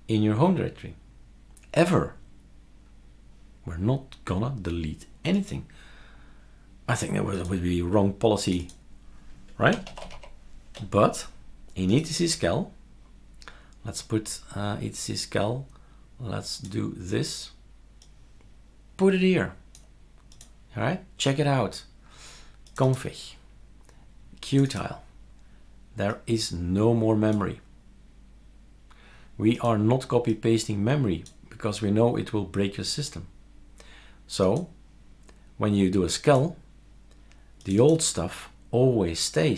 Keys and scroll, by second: 9.5-10.6 typing.